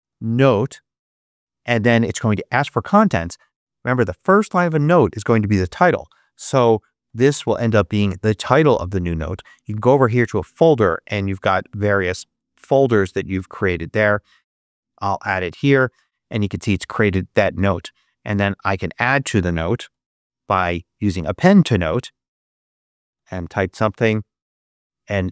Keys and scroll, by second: 0.0-0.7 typing, 0.9 Return, 6.5-8.2 typing, 9.2 Tab, 11.3 Down, 12.1 Up, 14.5 Return, 18.1 super+space, 19.4-20.3 typing, 22.0 Return, 22.5-24.3 typing, 24.5 Tab.